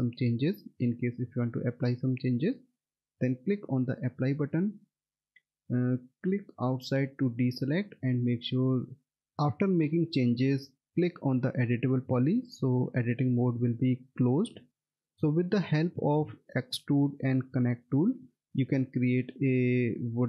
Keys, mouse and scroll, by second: 3.3 click, 4.5 middle click, 4.8-6.5 scroll down 1, 6.5 click, 11.8 click, 13.5 middle click, 15.1 alt+middle click, 18.9 alt+w, 19.6 alt+middle click.